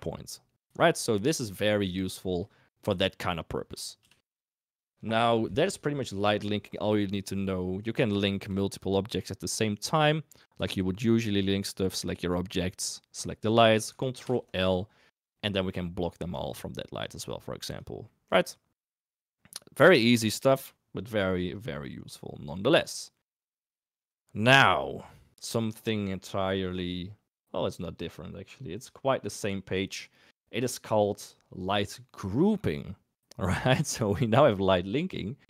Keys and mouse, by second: 2.8 KP_1, 4.0 KP_3, 8.3 shift+middle click, 13.1 shift+click, 14.1 ctrl+l, 18.0-18.4 middle drag, 18.8 middle drag.